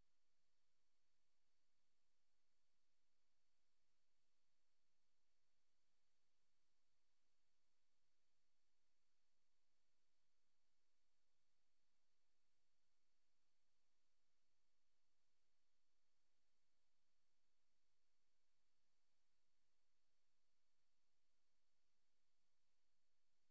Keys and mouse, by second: 0.0 click, 0.4 click, 2.2 click, 3.2 click, 4.4 ctrl+z, 4.6 ctrl+z, 6.2 ctrl+z, 8.2 click, 8.5 click, 9.2 click, 10.6 click, 10.9 click, 15.5 click, 16.8 click, 17.1 click, 20.1 click, 20.4 click, 20.9 click, 21.8 click, 22.2 click.